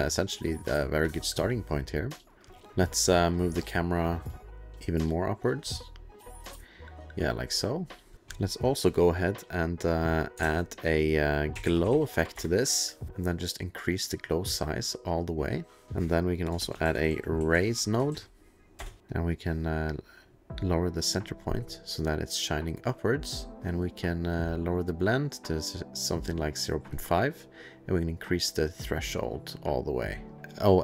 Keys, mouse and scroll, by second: 2.3 2, 2.7 click, 3.6 click, 3.8 click, 4.8 click, 8.1 click, 11.5-12.4 typing, 13.1 click, 14.3 click, 16.6-18.1 typing, 18.8 Return, 19.1 click, 20.2 click, 24.5 click, 28.3 click, 30.3 2.